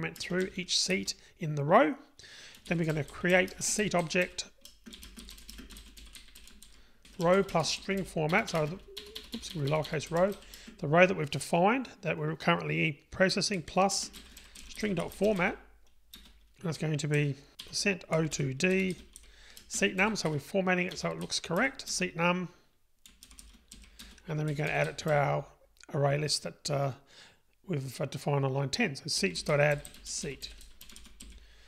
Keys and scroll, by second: 2.9 Return, 16.2 Return, 21.9 Return.